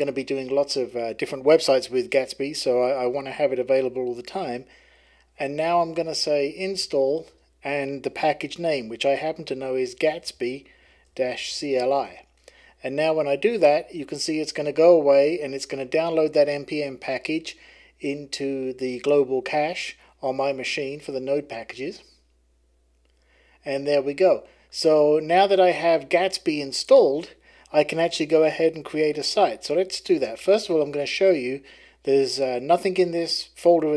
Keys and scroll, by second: 5.4-11.9 typing, 29.4-31.1 typing.